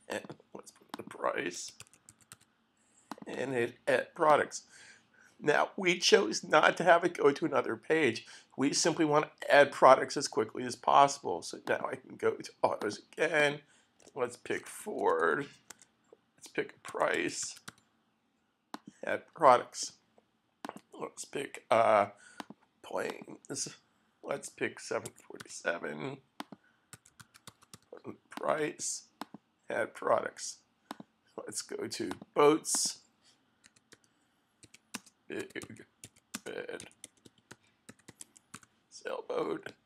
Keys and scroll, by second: 0.0-4.4 typing, 14.3-18.2 typing, 24.4-28.0 typing, 33.6-39.0 typing.